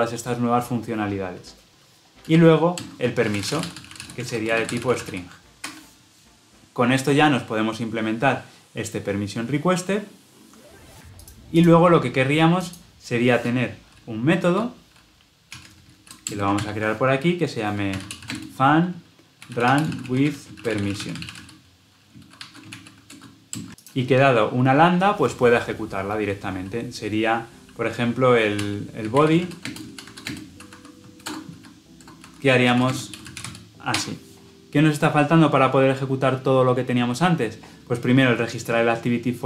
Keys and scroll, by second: 5.6 Escape, 16.5 ctrl+alt+l, 33.8 Escape.